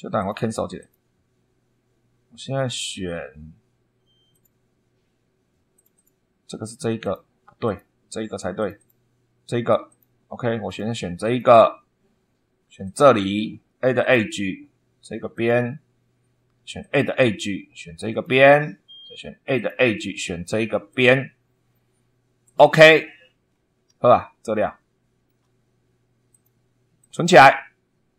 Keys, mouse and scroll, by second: 0.1 click, 0.7 click, 2.3 scroll up 1, 4.2 click, 5.7 click, 7.0 click, 7.6 click, 8.5 click, 9.8 click, 10.6 click, 11.2 click, 12.8 click, 13.9 click, 15.3 click, 16.7 click, 18.0 click, 19.5 click, 20.8 click, 22.4 click, 23.4 scroll down 2, 24.5 shift+click, 26.2 click, 26.9 click.